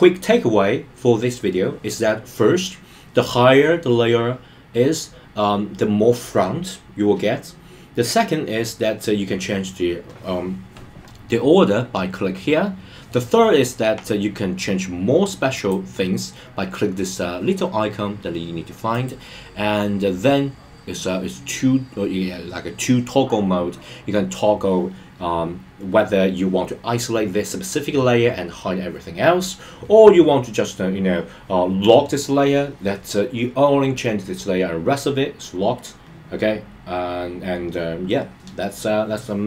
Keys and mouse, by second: 15.5 click.